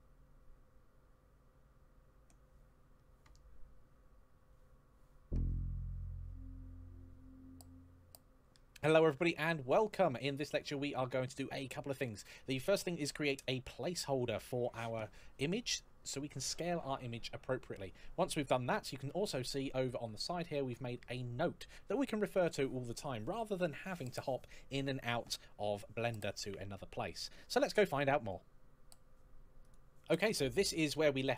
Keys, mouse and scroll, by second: 29.4 click.